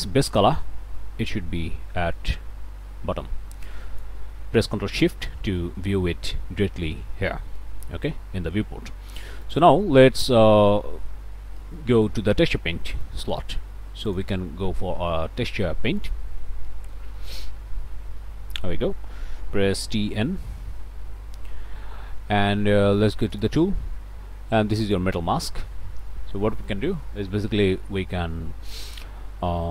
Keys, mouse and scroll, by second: 0.9-3.0 drag, 3.7 click, 4.9 ctrl+shift+click, 5.9 ctrl+space, 7.6 click, 8.5 scroll down 2, 8.8 scroll up 2, 8.8 middle click, 9.4 click, 10.0 middle click, 11.6 ctrl+space, 12.3 middle click, 12.4 shift+scroll down 1, 12.7 shift+click, 14.1 click, 16.0 click, 19.8 t, 20.1 n, 23.3 click, 24.8-29.7 drag.